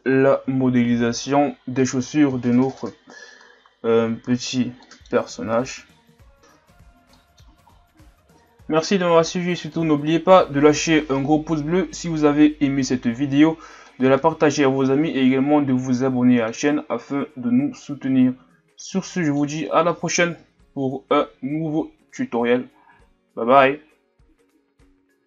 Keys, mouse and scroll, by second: 1.0-1.8 shift+scroll up 8, 1.8-2.4 middle drag, 2.4-2.7 shift+scroll down 2, 2.7-4.8 scroll up 5, 4.8 middle click, 5.1-5.7 scroll up 4, 5.7-6.4 middle drag, 6.4-7.1 scroll down 4, 7.1-7.7 middle drag, 7.7-8.3 scroll up 2, 8.3 scroll up 1, 9.7-12.7 middle drag, 13.8-16.9 middle drag, 17.2-17.9 scroll down 2, 17.9-20.4 middle drag, 20.4 KP_1, 21.7-22.2 scroll up 3.